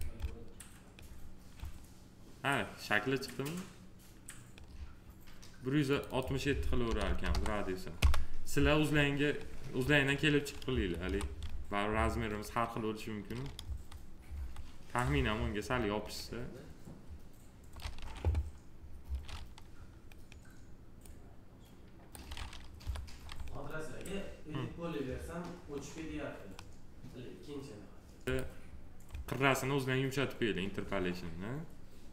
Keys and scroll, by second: 6.7 1, 7.8 Return, 10.5 F4, 13.5 F4, 17.8 f, 22.6 p.